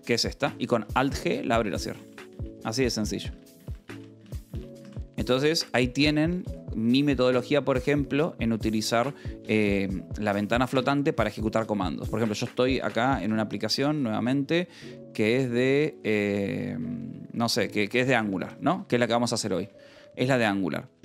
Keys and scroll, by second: 0.0 alt+g, 1.0 alt+g, 2.1 alt+g, 2.5 alt+g, 2.8 alt+g, 3.1 alt+g, 3.4 alt+g, 3.8 alt+g, 4.1 alt+g, 4.4 alt+g, 4.7 alt+g, 5.0 alt+g, 6.2 q, 6.4 Return, 7.6 p, 8.2 j, 8.3 space, 8.8 n, 9.0 Right, 9.4 Return, 10.3 n, 10.6 i, 10.7 Return, 12.7-14.6 typing, 15.5 Return, 15.7-19.3 typing, 18.9 Return, 20.1 Return.